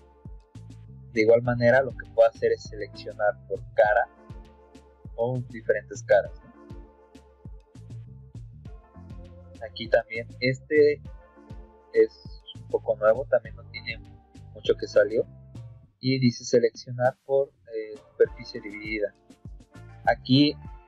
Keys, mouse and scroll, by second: 8.6 scroll up 2.